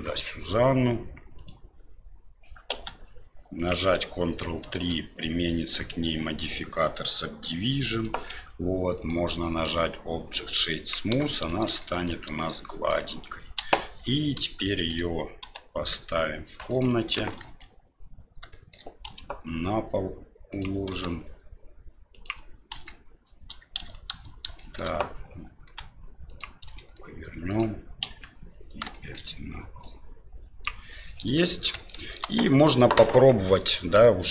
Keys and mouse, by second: 2.7 s, 4.7 ctrl+3, 8.9-10.9 drag, 11.5 shift+z, 11.9 middle click, 12.6-12.9 shift+middle drag, 13.6 KP_7, 14.8 shift+middle click, 15.4 g, 17.1 KP_1, 17.4 KP_3, 18.6 shift+middle click, 19.0 r, 20.9 g, 22.7 KP_7, 23.8 shift+z, 24.6 shift+middle drag, 25.6 s, 26.6 r, 28.0 KP_3, 29.0 shift+middle drag, 29.8 click, 31.9 shift+middle click.